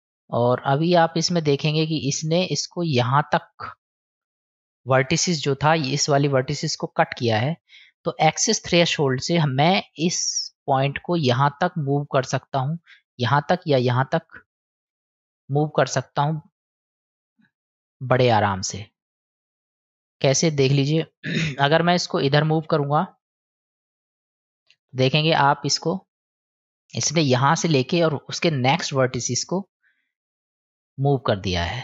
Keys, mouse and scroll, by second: 0.6 click, 9.4-9.9 middle drag, 14.7-16.3 middle drag, 17.6-18.9 middle drag, 21.9-24.6 drag, 29.2-30.5 middle drag.